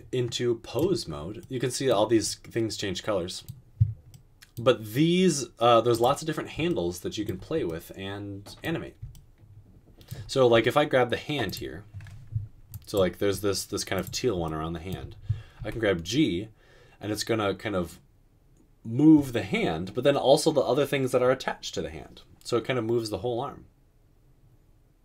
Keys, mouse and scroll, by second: 15.8 g.